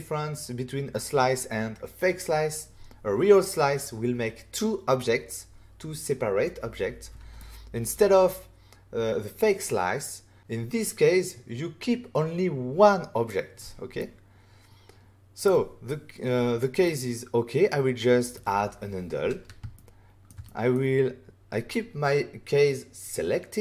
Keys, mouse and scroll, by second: 7.3 middle click, 14.0 middle click, 16.8 middle click, 19.7 ctrl+middle click, 20.2 middle click, 20.4 middle click.